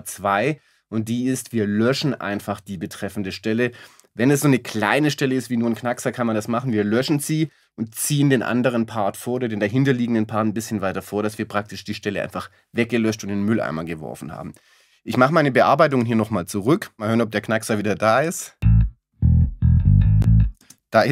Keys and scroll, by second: 20.6 space.